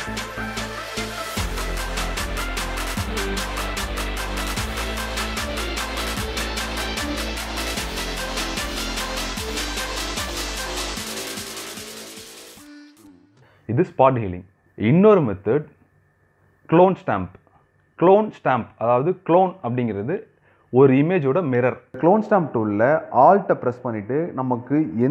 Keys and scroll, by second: 14.5 ctrl+space.